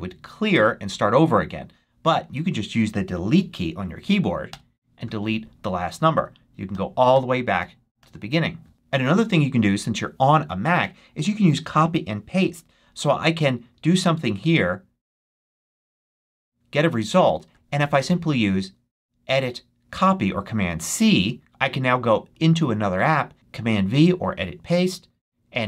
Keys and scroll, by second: 4.4 BackSpace, 6.6 BackSpace.